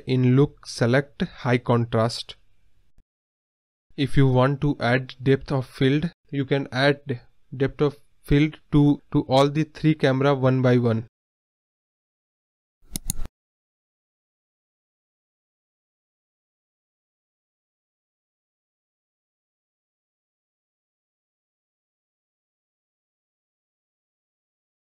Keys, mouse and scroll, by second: 4.9-6.2 drag, 6.2 scroll up 1, 6.8-8.6 drag, 10.4-12.7 drag, 12.7-13.5 scroll up 1, 13.5-16.9 drag, 17.9 click, 18.4 scroll down 1, 18.6-19.2 scroll up 1, 19.2 click, 20.3-23.2 drag, 23.3 click, 23.8 click.